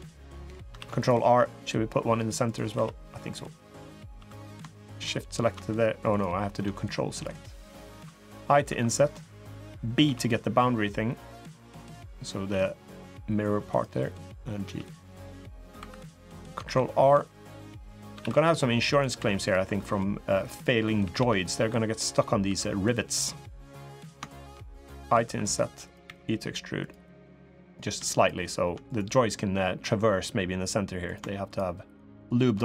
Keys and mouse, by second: 0.1 middle click, 0.5 ctrl+r, 2.5 3, 3.4 click, 3.9 3, 4.1 click, 5.0 ctrl+shift+click, 5.9 click, 6.9 ctrl+click, 8.4 i, 12.3 e, 14.4 g, 15.5 3, 15.8 click, 16.4 ctrl+r, 18.0 ctrl+r, 18.9 2, 19.2 click, 19.5 middle click, 20.1 middle click, 20.8 g, 22.2 3, 23.4 click, 24.0 shift+click, 25.0 i, 25.8 e, 27.0 click, 27.9 shift+click, 28.6 click, 30.8 click, 31.2 shift+click, 31.9 shift+click.